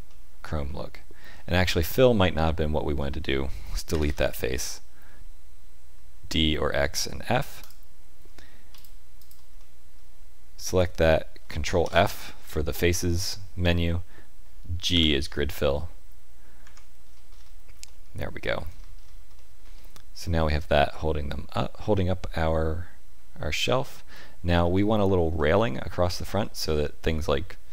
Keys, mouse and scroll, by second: 0.0 middle click, 1.2-1.9 scroll down 3, 1.6 middle click, 3.8 Delete, 7.5 alt+click, 8.7 alt+click, 9.5 middle click, 11.7 ctrl+f, 16.5 Tab, 17.0-17.8 scroll down 7, 17.8 middle click, 18.7-19.3 scroll down 3, 19.3 shift+middle click, 19.7 middle click.